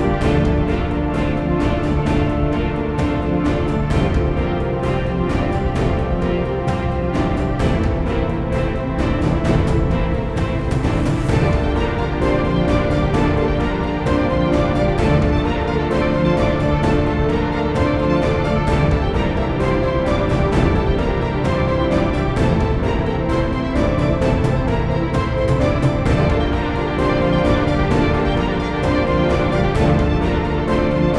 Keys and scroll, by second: 6.2 Delete, 8.2-8.9 typing, 10.0-10.7 typing, 11.8 Up, 12.0 Return, 22.2-23.4 typing, 24.3 Up, 24.3 Return, 29.1-29.8 typing.